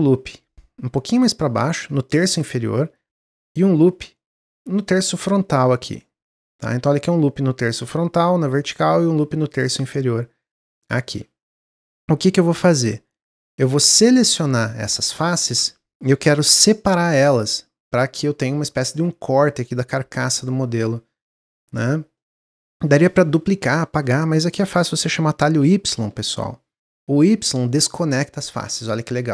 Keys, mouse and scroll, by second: 3.0 ctrl+r, 12.0 3, 12.3 click, 14.2 click, 15.3 ctrl+z, 20.1-25.6 middle drag, 25.6 y, 27.2 click.